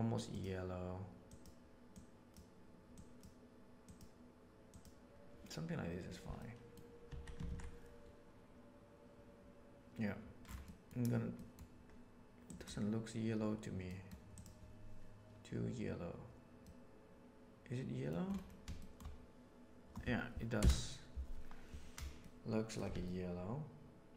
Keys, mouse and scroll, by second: 6.3 middle click, 7.0 Tab, 7.4 alt+a, 10.5 middle click, 11.4 middle click, 12.4 drag, 13.8 middle click, 14.3 click, 16.7-18.1 middle drag, 18.8 shift+middle click, 20.5 KP_0, 22.1 middle click, 22.9-24.1 middle drag.